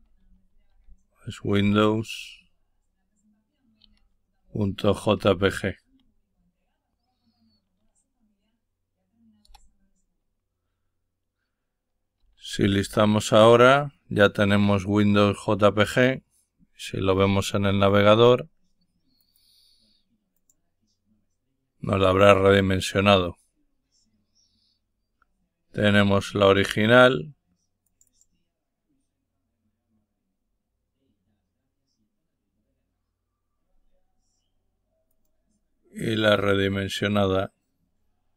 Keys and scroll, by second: 0.0-2.1 typing, 3.8-5.8 typing, 9.4 Return, 11.9-12.8 typing.